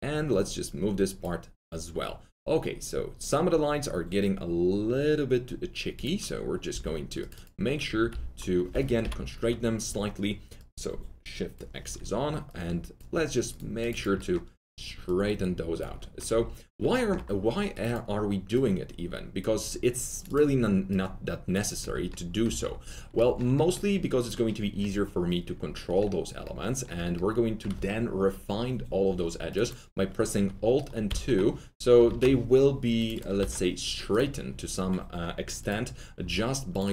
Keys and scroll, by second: 6.6 2, 7.9 r, 9.0 shift+c, 31.0 alt+2, 32.0 ctrl+z, 33.3 alt+2.